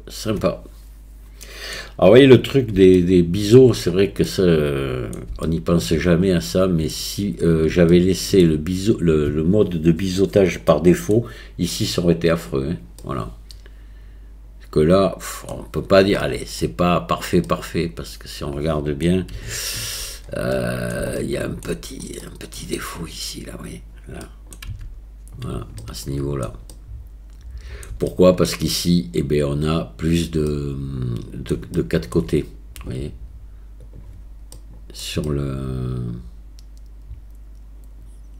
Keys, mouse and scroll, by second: 3.0-3.4 shift+middle drag, 4.2-5.1 middle drag, 5.5-5.9 shift+middle drag, 6.5-7.0 middle drag, 7.9-8.4 shift+middle drag, 10.7-11.1 middle drag, 13.0-15.5 middle drag, 16.2-16.6 middle drag, 17.5-19.0 middle drag, 19.6-19.9 shift+middle drag, 20.6-20.9 middle drag, 21.2-21.6 shift+middle drag, 22.2 middle click, 24.2 middle click, 24.7 Tab, 25.9 shift+click, 26.8 click, 26.8-27.8 middle drag, 28.1 shift+middle click, 30.5-31.5 middle drag, 31.8 shift+click, 33.8 click, 34.6 middle click, 35.2-38.3 middle drag.